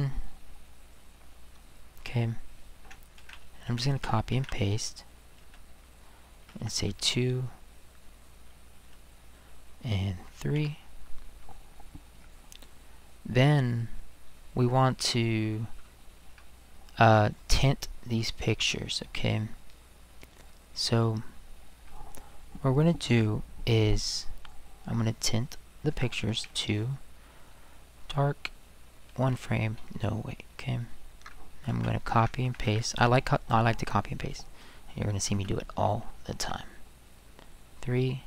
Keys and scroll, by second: 3.2 ctrl+c, 3.9 ctrl+v, 4.3 ctrl+v, 5.4 space, 6.7 2, 8.8 space, 10.5 3, 26.4 2, 29.1 1, 31.7 ctrl+c, 32.4 ctrl+v, 32.6 ctrl+v, 35.3 space, 36.4 3.